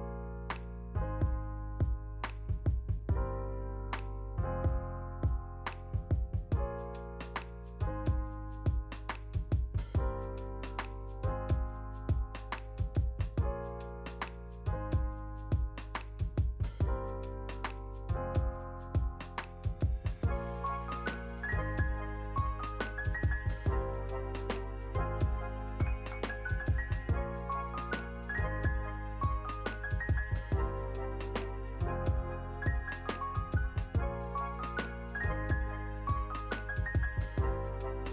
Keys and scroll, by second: 2.7 ctrl+c, 2.9 ctrl+v, 4.1 ctrl+c, 5.1 ctrl+v, 6.3 ctrl+v, 6.8 ctrl+s, 7.2 space, 12.8 space, 15.7 ctrl+s, 18.8 ctrl+s, 26.8 u.